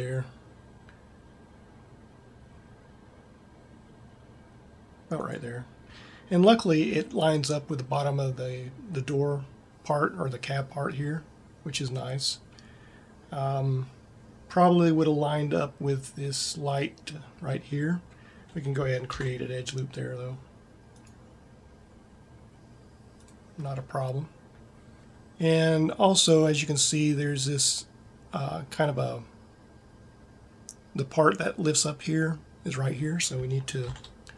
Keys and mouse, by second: 19.3 ctrl+r, 23.4-25.0 drag, 34.2 ctrl+r.